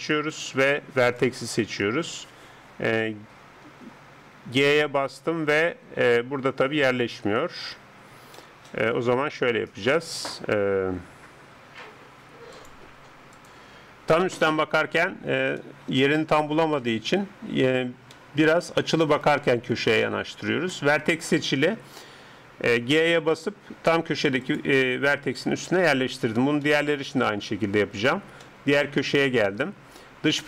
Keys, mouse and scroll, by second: 4.5 g, 6.9 scroll up 1, 7.7-13.4 middle drag, 14.5-20.3 middle drag, 20.3-20.8 scroll up 1, 23.0 g, 26.1-30.4 middle drag.